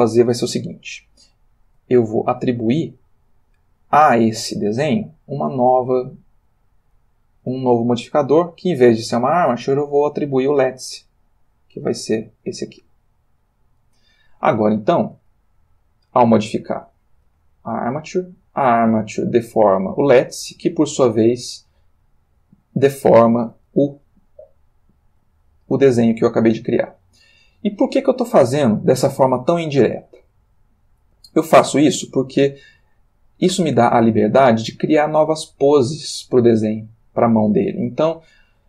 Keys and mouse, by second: 0.6 space, 0.9-1.9 shift+middle drag, 2.6 click, 5.6 click, 7.9 click, 9.7 click, 11.2 click, 11.5 middle click, 12.8 click, 16.6 click, 17.2 r, 18.6 click, 19.2 click, 19.7 r, 20.9 click, 21.8 click, 22.7 click, 23.5 r, 24.9 click, 26.4 click, 27.0 r, 27.7 click, 28.5 click, 28.8 r, 30.2 click, 30.9 click, 31.2 r, 32.3 click, 33.8 r, 35.1 click, 35.9 click, 36.6 r, 37.9 click.